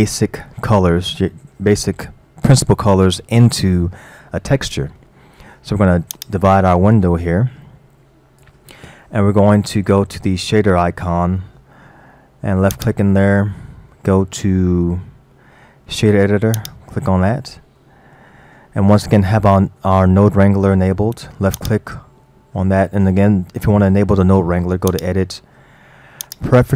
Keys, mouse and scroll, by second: 6.2-9.2 drag, 12.8-15.8 drag, 17.5-17.8 scroll up 3, 17.8-18.6 middle drag, 18.6-19.2 scroll up 7, 19.4-21.7 middle drag, 21.7 drag, 24.9-26.7 drag.